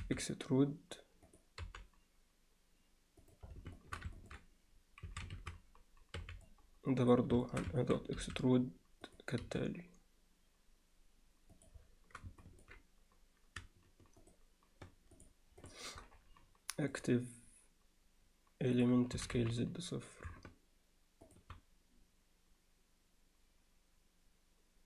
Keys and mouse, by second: 0.0 e, 1.7 g, 3.8 shift+middle click, 4.2 ctrl+middle click, 5.1 a, 6.2 b, 7.5 alt+shift+middle click, 7.8 ctrl+alt+middle click, 8.2 e, 9.4 g, 12.4 ctrl+alt+middle click, 15.2 shift+click, 15.6 shift+click, 17.0-18.9 drag.